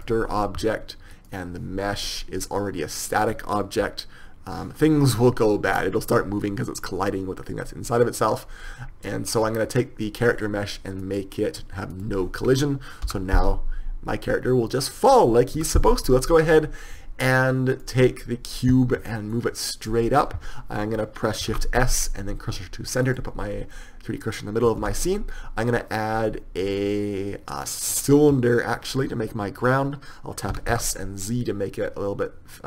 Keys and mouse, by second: 1.5-4.3 right drag, 6.0 p, 12.4-13.4 drag, 15.9 p, 18.1-20.0 right drag, 19.7-23.5 drag, 23.5 shift+s, 28.5 shift+a, 30.9 s.